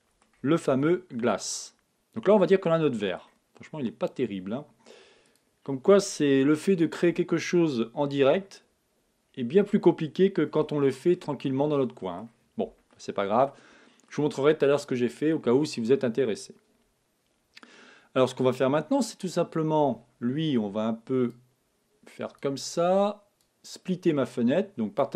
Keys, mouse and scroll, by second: 0.3-3.1 middle drag, 0.6 Tab, 5.2-7.0 drag, 6.4-8.3 middle drag, 9.3-14.7 middle drag, 21.2-23.2 drag, 23.3-25.1 drag.